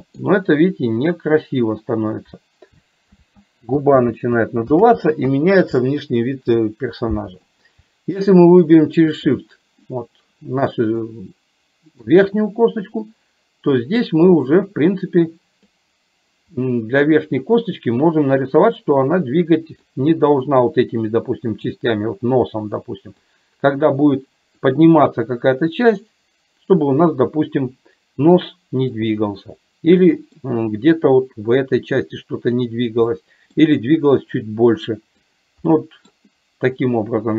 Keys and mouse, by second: 11.0-12.0 middle drag, 13.1-15.8 drag, 16.6-17.6 middle drag, 18.4-20.0 drag, 20.1 middle click, 22.1-23.4 drag, 24.6-29.1 drag, 30.1 middle click, 31.5-32.6 drag, 33.1 middle click, 34.3-35.3 drag, 35.8 middle click.